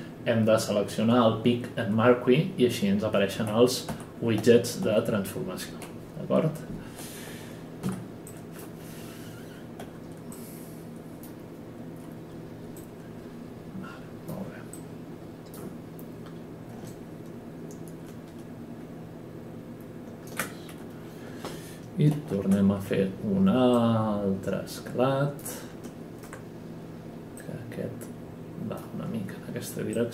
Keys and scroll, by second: 3.3 e, 7.8 F9, 9.8 w, 22.1 ctrl+e.